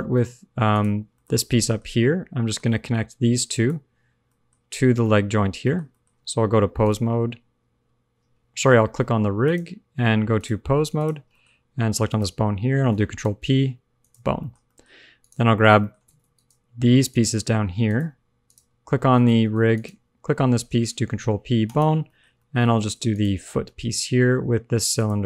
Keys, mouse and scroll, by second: 0.0 super+z, 0.6 click, 1.1 shift+middle click, 2.0 middle click, 2.4 shift+middle click, 2.6 middle click, 3.4 shift+click, 4.3 shift+middle click, 4.9 shift+middle click, 5.6 middle click, 6.0 shift+middle click, 6.7 click, 8.5 shift+middle click, 9.4 shift+click, 10.3 click, 11.4 shift+middle click, 11.5 scroll up 1, 12.0 shift+click, 13.2 ctrl+p, 14.3 shift+middle click, 14.5 scroll up 1, 14.6 middle click, 15.2 click, 15.6 shift+middle click, 15.7 middle click, 16.0 ctrl+Tab, 16.3 click, 17.0 shift+click, 17.8 click, 18.4 click, 19.2 ctrl+Tab, 19.7 shift+click, 21.0 ctrl+p, 22.0 shift+middle click, 22.2 scroll up 1, 22.3 middle click, 22.7 ctrl+Tab, 23.0 click, 24.0 shift+middle click, 24.6 shift+scroll down 1, 24.9 shift+click.